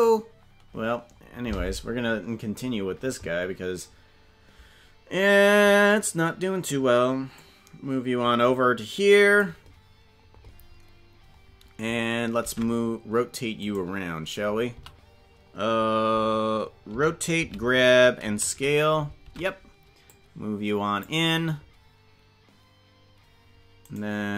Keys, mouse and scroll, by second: 7.4-9.4 drag, 12.5 ctrl+Tab, 13.7 right click, 14.7 a, 16.9 alt+r, 17.4 alt+g, 18.2 alt+s, 19.2 ctrl+Tab, 20.2 click, 23.9 right click.